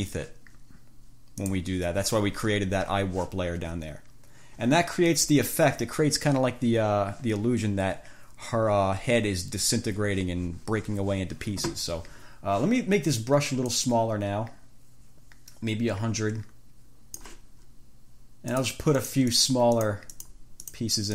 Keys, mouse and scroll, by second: 0.0 click, 1.7 click, 13.9-17.6 drag, 18.8 click, 19.2 click, 20.9 click.